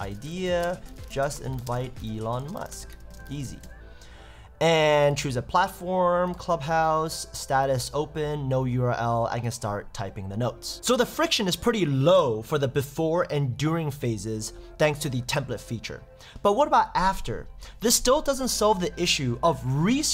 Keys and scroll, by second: 0.6 shift+space, 0.8 shift+j, 2.1 shift+e, 3.2 shift+e.